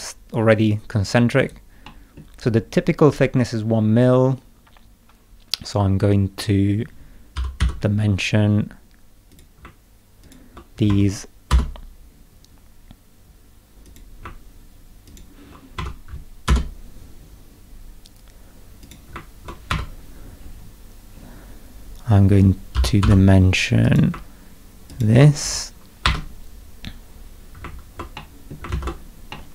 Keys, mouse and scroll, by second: 1.4 right click, 1.8 middle click, 7.1-8.1 typing, 9.3 click, 10.2 ctrl+click, 10.9 1, 11.5 Return, 13.8 click, 15.1 ctrl+click, 15.8 1, 16.5 Return, 18.8 click, 19.7 Escape, 20.4 scroll down 2, 21.1 scroll up 2, 22.7 k, 23.0 d, 23.8 click, 24.9 ctrl+click, 26.0 Escape, 27.1 scroll down 2, 28.1 middle click, 28.7 ctrl+z, 29.3 middle click.